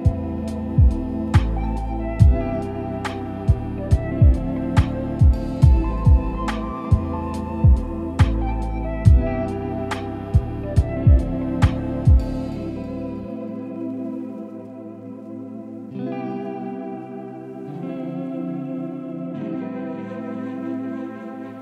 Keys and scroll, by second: 5.1 ctrl+z, 7.7 ctrl+c, 8.1 ctrl+v.